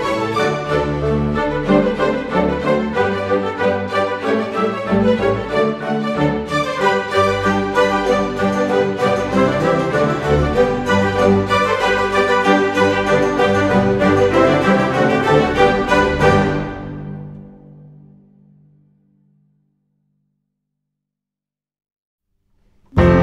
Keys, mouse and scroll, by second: 0.6 click, 2.0 click, 3.8 click, 4.4 click, 4.9 click, 6.3 click, 7.5 Delete, 8.7 click, 9.1-9.6 scroll down 2, 11.2 click, 12.2 click, 12.9-13.3 scroll up 1, 13.5 right click, 14.3 click, 14.7 click, 15.4-16.4 drag, 16.5 click, 16.7 scroll down 2, 17.0-17.3 scroll up 1, 17.6-18.7 drag, 18.9-19.4 scroll up 2, 19.4 click, 20.5 s, 22.6 click.